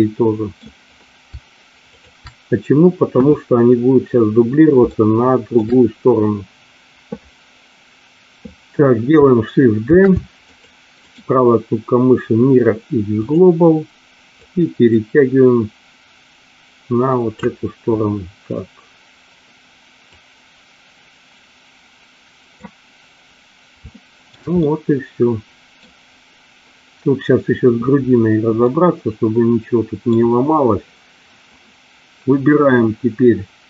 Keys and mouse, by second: 1.9 shift+click, 3.2 KP_1, 4.9 shift+middle click, 9.7 shift+d, 10.4 click, 11.1-13.2 right drag, 14.5-17.3 drag, 20.1-22.5 drag, 23.9 shift+middle click, 24.5-25.9 middle drag, 28.6-30.0 middle drag.